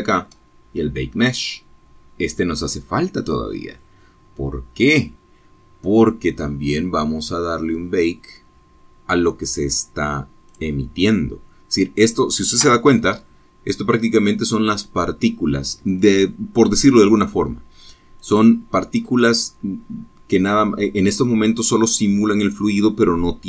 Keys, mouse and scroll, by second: 8.0 click, 10.5 space, 14.6 click, 15.7 click.